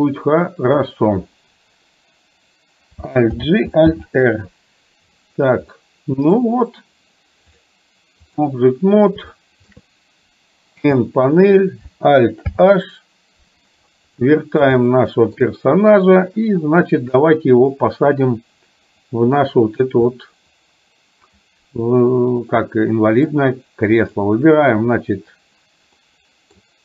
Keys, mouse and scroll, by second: 0.8 click, 3.4 alt+g, 4.0 alt+r, 5.8-6.4 middle drag, 7.8 click, 9.4 shift+middle click, 10.8 n, 12.8 alt+h, 14.1 middle click, 14.9 shift+middle click, 17.3-17.9 middle drag, 20.3-21.4 middle drag, 22.5-23.3 middle drag, 24.1 click, 26.0-26.6 middle drag.